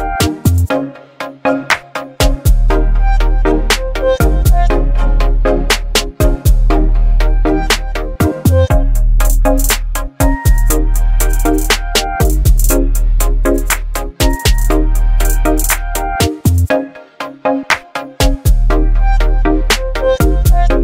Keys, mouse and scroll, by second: 0.0 ctrl+t, 2.1-5.2 shift+drag, 11.0 b, 12.3 right click, 13.3 scroll up 1, 14.7-15.4 drag, 17.0 alt+scroll up 1, 17.6 space, 17.6-18.2 click, 18.1 space, 19.3 click.